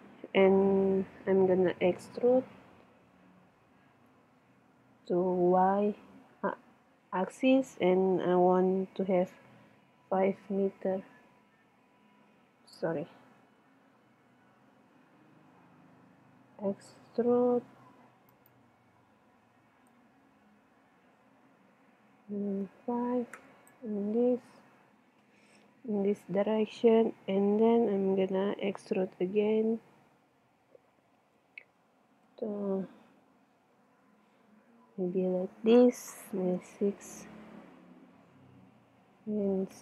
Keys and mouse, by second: 2.7 e, 19.1 click, 19.9-20.9 middle drag, 20.9 click, 24.4-26.3 middle drag, 26.6-28.4 middle drag, 31.4 e.